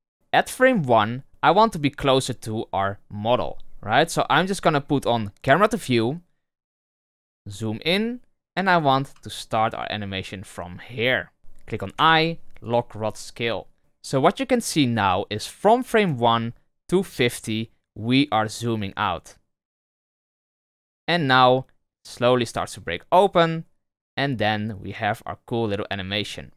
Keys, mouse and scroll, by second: 0.1-2.4 drag, 5.4 click, 6.6-7.7 scroll up 4, 7.7-8.6 shift+middle drag, 8.6 scroll up 2, 9.2-11.4 shift+middle drag, 16.0 space.